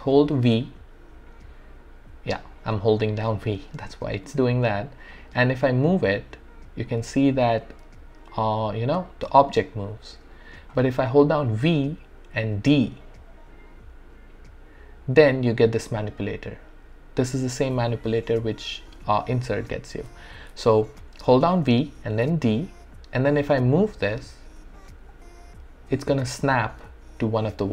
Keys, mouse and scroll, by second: 0.4-2.0 typing, 3.3 v, 4.6-8.6 typing, 11.2-14.7 typing, 16.5-16.9 typing, 22.0-27.3 typing.